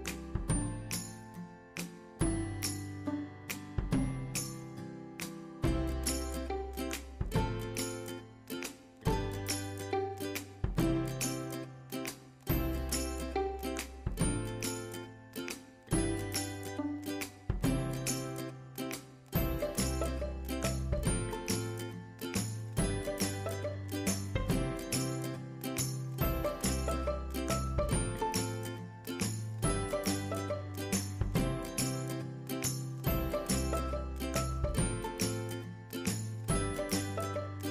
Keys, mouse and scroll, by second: 6.7-17.8 drag, 19.0 click, 23.0 scroll down 1, 29.0-30.4 scroll up 1, 30.4 shift+F2, 34.1-37.7 drag.